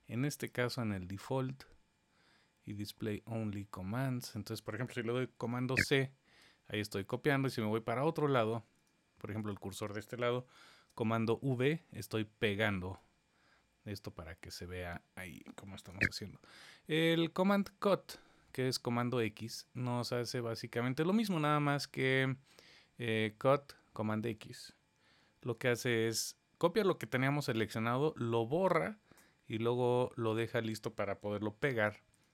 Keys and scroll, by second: 5.3 super+c, 10.4 super+v, 15.7 super+z, 25.0 super+x.